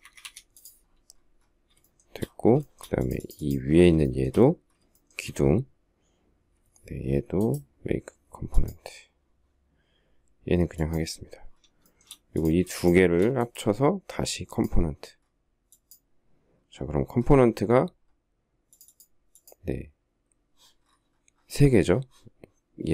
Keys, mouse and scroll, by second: 0.0 Escape, 1.8 shift+middle click, 2.4 shift+middle click, 3.7 shift+scroll, 3.8 shift+middle click, 4.7 shift+middle click, 11.6 shift+middle click, 12.5 shift+click.